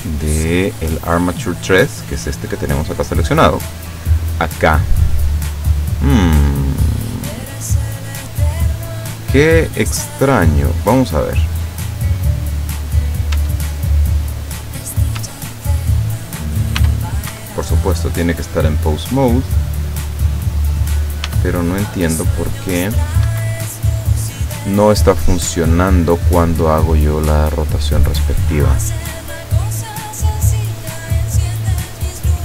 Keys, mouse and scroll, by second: 0.1 right click, 3.2 right click, 5.5 click, 7.3 click, 11.7 right click, 13.4 Tab, 15.3 Tab, 15.5 click, 16.0 click, 16.8 r, 17.4 Escape, 18.9 click, 19.8 click, 21.3 r, 23.3 Escape, 29.2 right click, 30.7 right click.